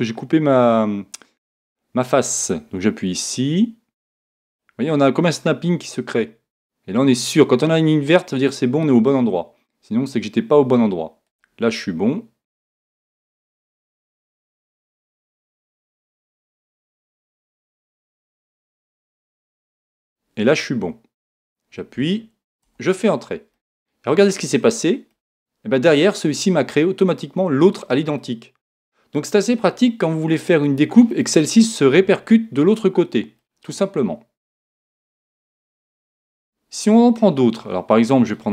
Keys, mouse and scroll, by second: 23.5-27.7 middle drag, 28.2-30.1 middle drag, 33.4-35.3 middle drag.